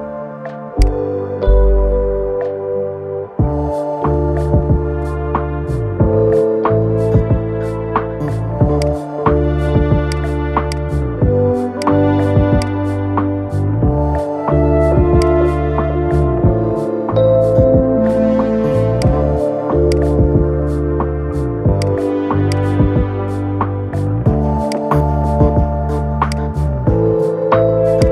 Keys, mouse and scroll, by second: 0.5 click, 1.2 scroll up 2, 2.6 ctrl+KP_Add, 3.0 ctrl+KP_Add, 3.8 scroll up 4, 4.9 scroll up 7, 5.4-6.6 middle drag, 6.6-7.0 scroll down 11, 8.5-11.6 drag, 14.9-16.7 drag, 16.7-17.0 scroll up 3, 18.7 click, 21.6 click, 22.2 shift+click, 24.4-28.1 drag.